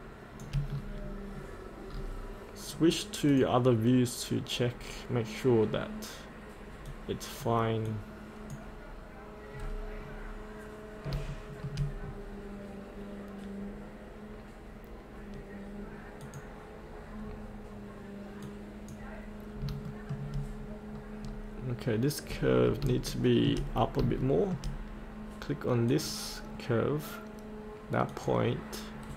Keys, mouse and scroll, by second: 0.7-1.9 scroll up 1, 1.9-3.3 scroll down 1, 3.3 click, 9.6 scroll down 1, 11.3 shift+middle click, 12.1-13.9 scroll down 1, 16.2 click, 17.3-18.4 scroll up 1, 18.4 click, 19.5 scroll up 1, 19.8 shift+middle click, 20.9-22.2 scroll down 1, 22.2-22.8 scroll up 1, 23.1 shift+middle click, 24.3 middle click, 24.3 scroll up 1, 25.9 click, 29.0-29.1 scroll down 1.